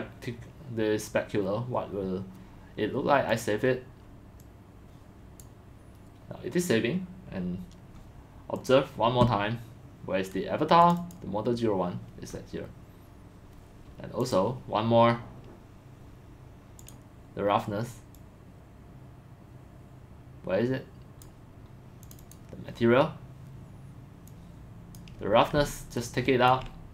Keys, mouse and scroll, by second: 3.3 click, 4.4 click, 5.9-7.7 drag, 8.5 click, 9.0-9.4 drag, 10.8 click, 12.4 scroll, 14.3 scroll, 14.3 click, 14.8-15.2 drag, 16.8 click, 21.4 click, 22.0 click, 22.2 click, 24.3 click, 26.0-26.5 ctrl+drag.